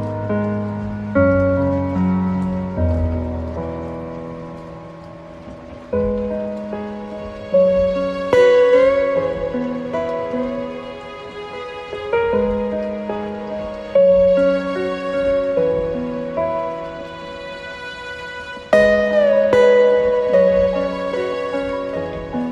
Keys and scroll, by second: 17.1 ctrl+alt+space.